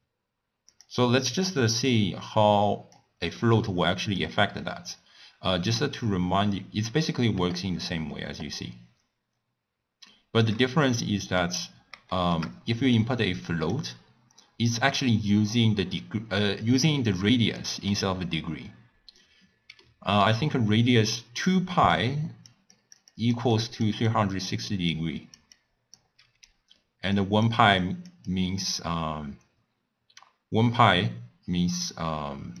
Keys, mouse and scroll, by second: 1.1 click, 2.0-7.3 drag, 11.1-11.5 middle drag, 11.5-12.2 scroll up 2, 12.2 shift+middle click, 13.0-16.0 drag, 19.9-20.9 middle drag, 20.9-32.6 typing, 22.0 click, 22.8 click, 23.2 click, 23.6 click, 24.1 click, 25.0 click, 25.6-26.0 drag, 27.2 click, 27.9 click, 28.4 click.